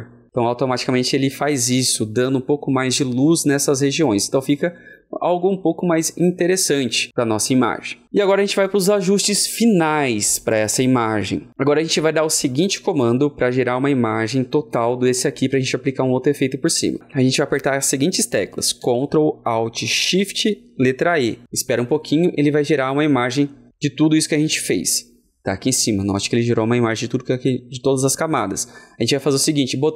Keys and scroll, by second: 21.0 ctrl+alt+shift+e.